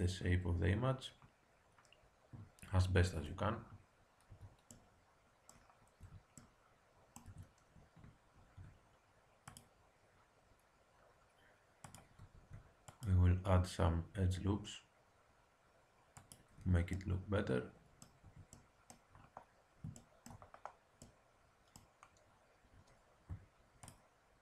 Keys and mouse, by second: 3.1 z, 4.3 a, 4.7 click, 6.0 Tab, 7.2 Tab, 8.3 ctrl+r, 12.3 ctrl+r, 16.5 Tab, 18.2 Tab, 23.8-24.4 drag.